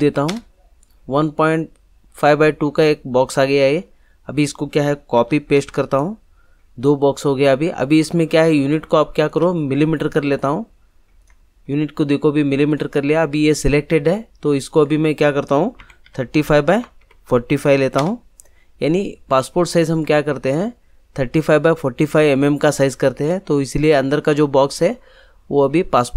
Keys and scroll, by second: 0.2 Return, 5.1 ctrl+c, 5.5 ctrl+v, 15.8 3, 16.0 5, 16.7 Tab, 17.0 4, 17.2 5, 17.9 Return.